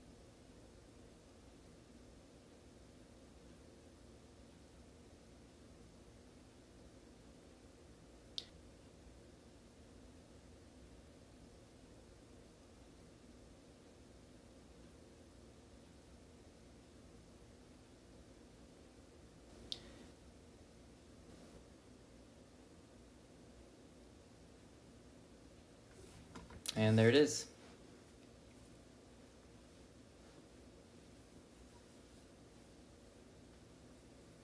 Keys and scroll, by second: 0.7-1.3 typing, 1.7 ctrl+Down, 2.4 ctrl+Down, 3.8-4.1 typing, 5.3 Return, 5.6-8.0 typing, 9.3-13.4 typing, 14.4 typing, 29.7-30.8 typing, 32.3 9, 33.0 ,, 33.3 space.